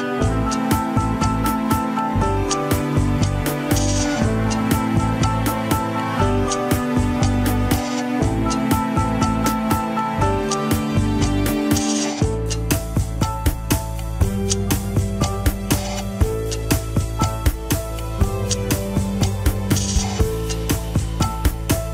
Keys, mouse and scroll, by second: 0.4 scroll down 1, 1.3-3.3 drag, 4.2-5.3 right drag, 5.3-6.6 drag, 6.6-7.5 right drag, 7.5-8.8 scroll down 6, 8.4 KP_1, 8.8-9.2 shift+middle drag, 9.2-10.0 scroll up 1, 10.0-12.9 shift+middle drag, 13.2 KP_3, 13.4-13.8 scroll up 2, 13.6 shift+middle drag, 14.2 click, 14.8 Tab, 15.2 s, 16.3 click, 17.1 s, 21.0 click.